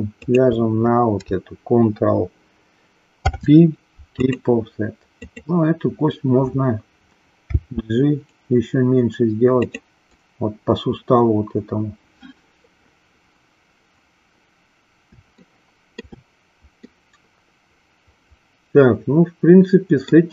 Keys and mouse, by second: 0.1 shift+click, 3.1 ctrl+p, 7.4 g, 15.4 shift+middle click, 16.8-20.1 middle drag.